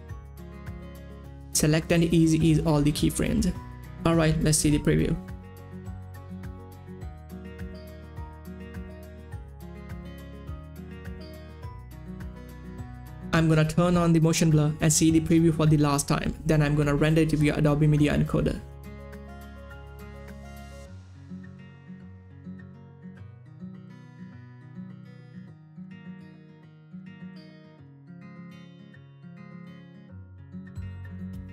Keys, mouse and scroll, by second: 0.1 Page_Up, 0.3 click, 1.3 click, 1.5 Return, 1.7 Page_Down, 1.9 click, 2.1 9, 2.3 Return, 2.5 Page_Down, 3.2 click, 3.6 F9, 4.2 click, 4.5 space, 11.6 space, 11.7 click, 12.8 ctrl+s, 14.6 click, 18.0 click, 19.9 space, 25.0 space, 25.1-29.9 drag.